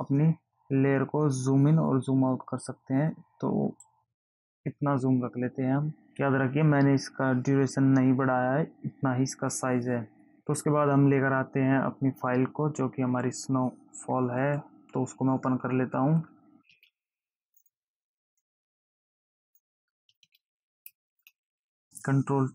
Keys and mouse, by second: 1.0 click, 16.8 ctrl+o, 17.8 click, 18.6 click.